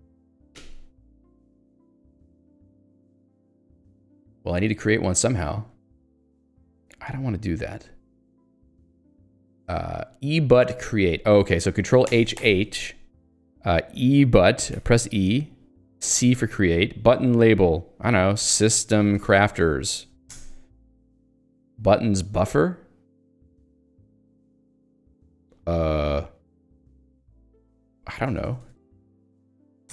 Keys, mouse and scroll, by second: 0.3 Escape, 0.6 j, 1.3 k, 3.9 middle click, 5.7 middle click, 14.7 e, 16.2 c, 18.2-20.4 typing, 28.2 BackSpace, 29.3 shift+h.